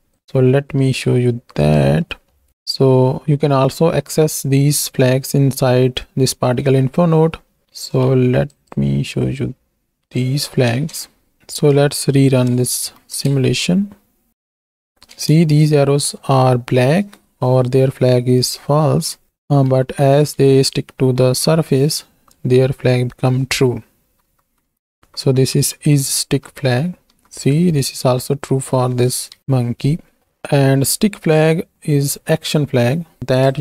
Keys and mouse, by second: 2.0 click, 6.6 middle click, 9.2-10.4 drag, 11.4 KP_1, 12.0-13.1 shift+middle drag, 12.0 shift+KP_1, 13.1 shift+Left, 14.3 space, 15.1 space, 19.3 space, 20.3 Right, 21.0 Right, 21.7 Right, 24.1 Right, 24.5 Right, 25.0 Right, 25.3 Right, 25.5 Right, 26.0 Right, 26.1 Right, 26.6 Right, 26.8 Right, 27.2 Right, 29.4 Right, 30.2 middle click, 32.4 middle click, 33.3 click.